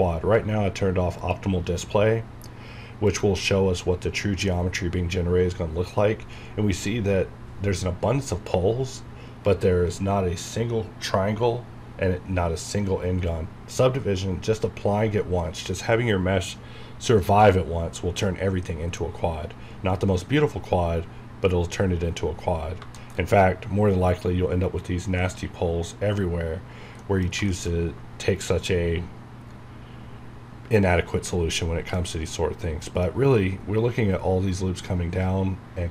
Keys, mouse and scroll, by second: 1.2 click, 13.3 scroll down 1, 22.3-22.8 scroll down 1, 23.0 shift+middle click, 25.1-25.5 scroll up 1, 26.6-27.0 scroll down 1, 27.0 middle click, 27.5 shift+middle click, 27.7 scroll up 1, 31.9 middle click, 33.1 scroll up 1.